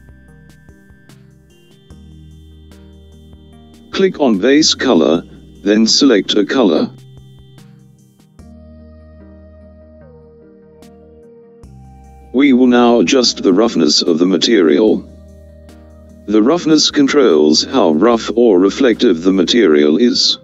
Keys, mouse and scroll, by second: 2.4 click, 7.8 click, 14.7-15.9 scroll down 2, 20.3-20.4 drag.